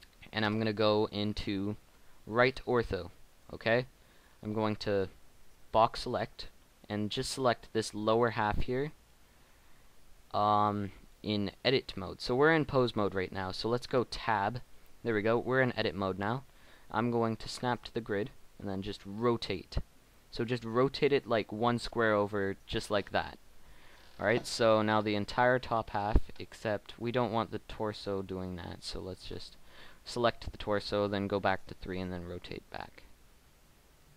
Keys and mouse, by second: 0.4 KP_1, 1.0 KP_1, 1.0 KP_3, 4.0-7.0 drag, 6.2 b, 14.3 Tab, 18.7 r, 24.8-26.5 middle drag, 26.5-27.8 right drag, 27.8 middle click, 29.4 KP_1, 30.6 KP_3, 32.1 r.